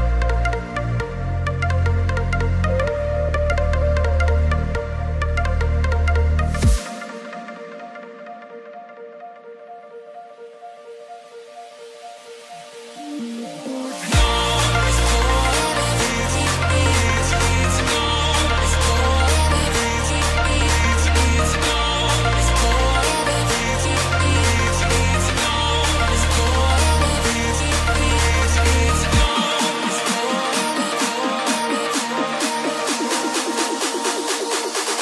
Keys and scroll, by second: 6.0-6.8 typing, 20.1 ctrl+c, 20.4 ctrl+f, 25.5 ctrl+shift+], 29.0 ctrl+shift+], 29.1 ctrl+g, 30.0 ctrl+-, 31.3 ctrl+-, 31.3 ctrl+-, 32.4 ctrl+-.